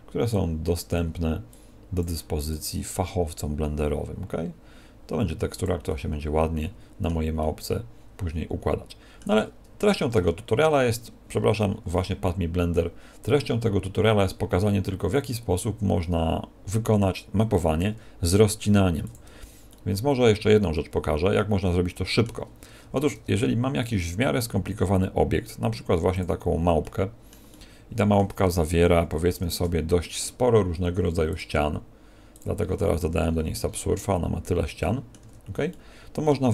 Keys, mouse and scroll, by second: 0.2 click, 1.4 click, 5.8 middle click, 7.3 middle click.